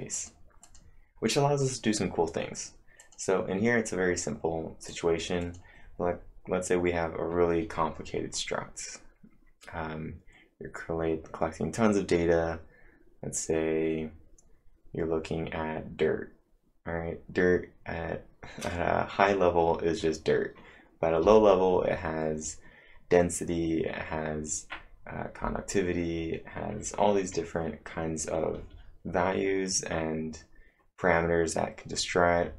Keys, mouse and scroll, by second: 0.1 click, 0.6 click, 3.0 click, 4.9 click, 5.4-7.9 click.